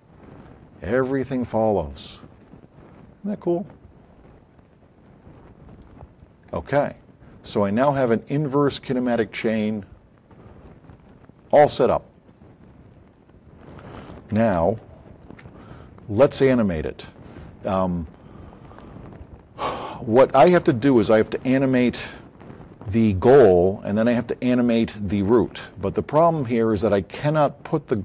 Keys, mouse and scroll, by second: 5.9 click, 7.6 click, 12.4-13.8 drag, 14.6 z, 27.4 click.